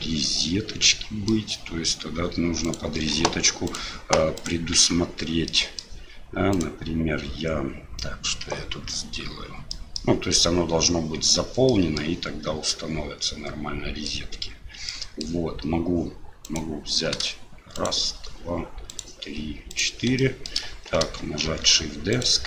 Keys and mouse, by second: 2.6 click, 3.7 click, 4.3 click, 4.7 Tab, 5.5 middle click, 6.5 click, 9.7 middle click, 11.7 middle click, 12.7-14.1 middle drag, 14.9 middle click, 16.4 right click, 17.7 shift+right click, 18.9 shift+right click, 19.7 shift+right click, 20.2 shift+middle click, 21.5 shift+d.